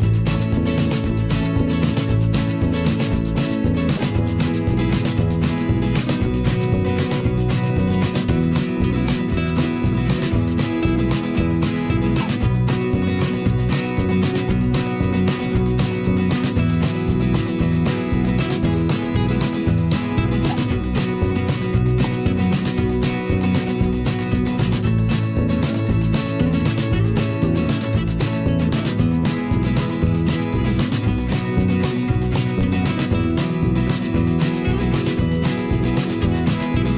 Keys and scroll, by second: 5.6 ctrl+z, 6.3 a, 6.8 p, 7.5 ctrl+z, 8.2 ctrl+z, 13.4 a, 13.6 p, 16.3 p, 22.7 ctrl+z, 23.7 ctrl+z, 25.1 v, 25.5 p, 27.8 v, 29.9 p, 30.3 v, 30.4 ctrl+a, 32.5 a, 33.9 ctrl+a, 35.6 ctrl+z, 36.2 ctrl+z.